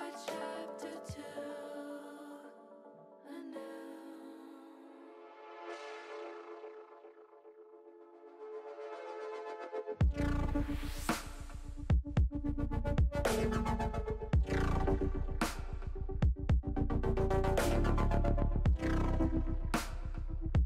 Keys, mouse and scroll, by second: 0.7-2.2 drag, 3.2 r, 4.6 click, 5.3-7.2 drag, 7.7-8.8 middle drag, 9.3 middle click, 10.6 middle click, 12.1 middle click, 12.8 click, 14.4 click, 15.7-16.9 drag, 18.9 middle click, 19.8 middle click, 20.4 KP_7.